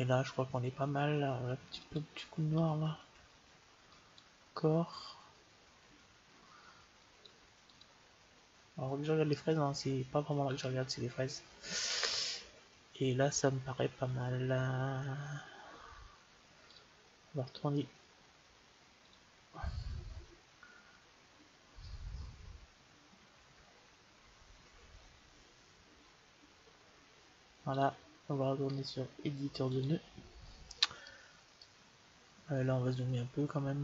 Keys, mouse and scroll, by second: 1.7-3.5 drag, 3.7-5.7 drag, 6.9-9.4 drag, 16.5-18.3 drag, 18.9-20.7 drag, 27.6-29.4 drag, 30.9-32.7 middle drag.